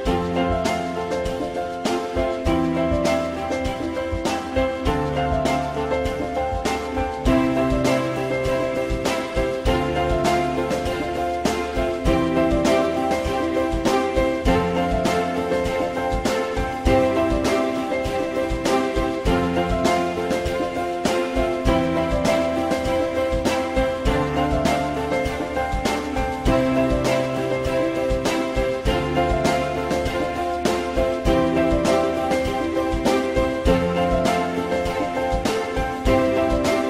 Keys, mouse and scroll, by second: 5.1 alt+middle click, 12.1 alt+middle click, 13.8 ctrl+z, 15.4 alt+middle click, 19.1 ctrl+z, 20.6 alt+middle click, 24.2 alt+middle click, 34.7 F4, 35.2 alt+middle click.